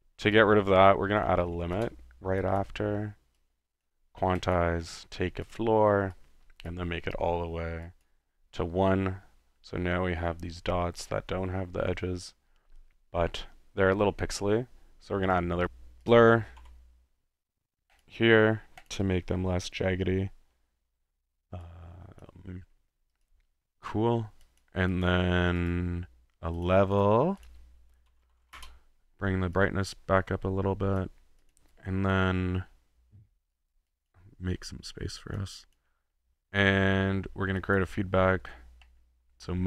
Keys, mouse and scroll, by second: 0.3 click, 0.4-2.2 typing, 2.6 click, 3.8 click, 4.4 click, 5.4 click, 6.1-6.7 drag, 7.8-8.2 drag, 15.2-15.6 drag, 15.4-16.1 typing, 16.0 click, 18.0 click, 18.8 drag, 19.3-20.8 middle drag, 21.6 click, 23.1-23.5 drag, 24.4-24.8 drag, 25.1 drag, 25.7 click, 26.6 click, 27.1 click, 27.1-29.1 typing, 27.4 click, 29.5-31.1 drag, 31.4 click, 31.8 click, 32.6-33.3 middle drag, 33.5-33.8 drag, 34.1 drag, 34.7 click, 35.7 click, 36.0-36.6 middle drag, 37.6 click, 38.8 middle click.